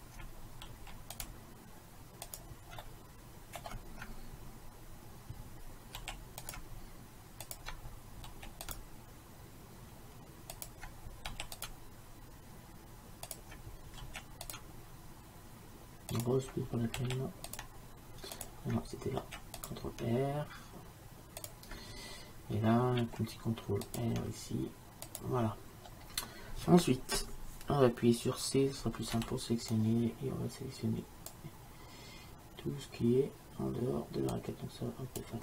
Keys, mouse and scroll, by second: 0.7 ctrl+r, 2.9-6.1 middle drag, 6.1 ctrl+r, 8.4 ctrl+r, 11.4 ctrl+r, 14.1 ctrl+r, 17.1 ctrl+r, 19.3 ctrl+r, 23.1 ctrl+r, 26.0-29.2 middle drag, 29.2 c.